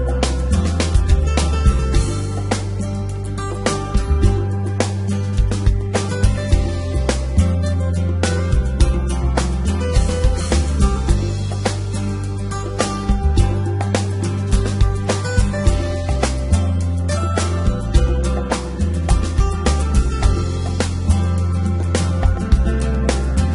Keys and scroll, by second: 0.2 g, 0.4 y, 1.9 Tab, 7.1 Tab, 10.6 g, 10.8 y, 16.1 g, 17.1 y.